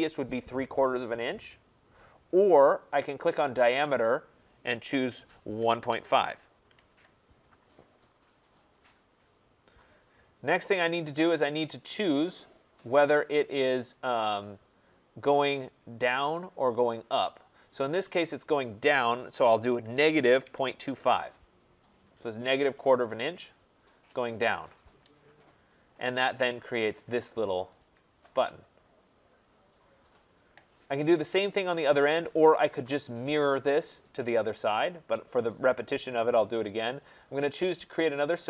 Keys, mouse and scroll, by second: 3.7 click, 5.3-6.8 typing, 8.7 Return, 19.8-21.3 typing, 24.0 Return, 25.3-25.8 scroll up 4, 26.4 click, 27.6 middle click, 27.7 click, 29.5 middle click, 29.5 middle click, 29.6 middle click, 30.0 middle click, 30.1 middle click, 32.7 click, 32.7 scroll, 35.6 click.